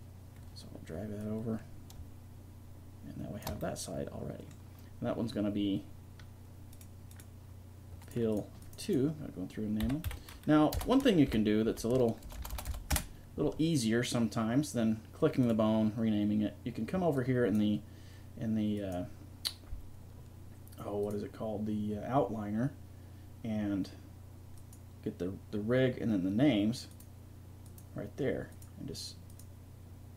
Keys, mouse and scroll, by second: 1.2-3.4 drag, 3.7-4.8 middle drag, 4.8-6.1 drag, 6.7-8.0 right drag, 8.0 middle click, 8.9-10.3 right drag, 12.4 BackSpace, 12.5 BackSpace, 15.4-17.1 drag, 17.1-20.8 middle drag, 21.0-23.5 drag, 24.6-30.1 drag.